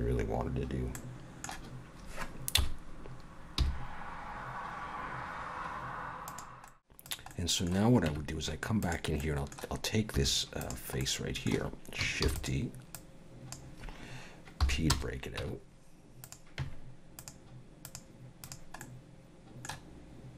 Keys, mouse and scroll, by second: 1.0 middle click, 2.6 KP_7, 3.6 g, 6.5 shift+click, 6.5 middle click, 6.5 x, 6.7 middle click, 7.1 click, 7.3 middle click, 8.1 Tab, 8.8 click, 9.2 middle click, 10.1 3, 10.6 click, 11.0 middle click, 12.2 shift+d, 12.9 click, 14.6 p, 15.7 Tab, 16.2 click, 17.2 click, 18.8 middle click.